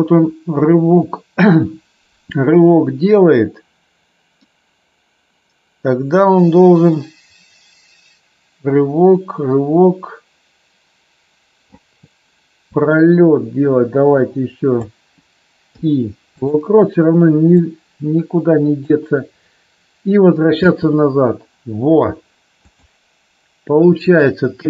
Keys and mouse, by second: 12.7-14.8 drag, 15.6 i, 17.6-18.8 drag, 20.6 space, 22.7-23.8 drag, 23.9 click.